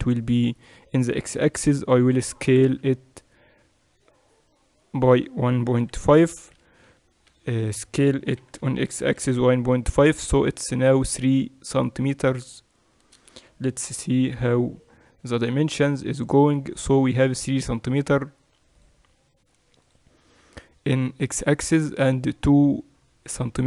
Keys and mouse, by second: 2.5 s, 8.4 s, 13.9 n, 15.3-17.2 drag, 18.7-23.6 drag.